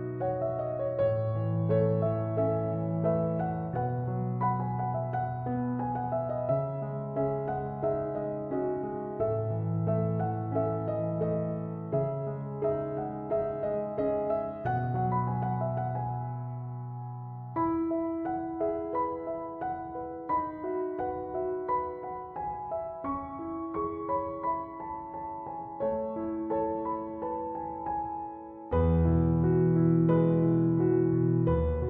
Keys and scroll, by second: 25.4 4, 25.7 0, 26.2 Return.